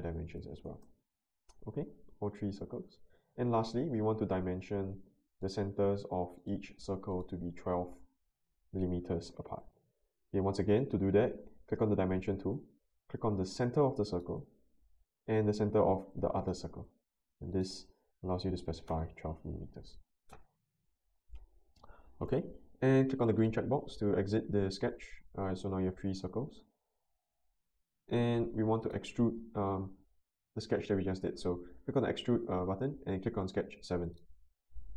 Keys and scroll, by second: 0.4 typing, 0.7 Return, 8.0-8.8 typing, 9.3 Return, 18.3-19.1 typing.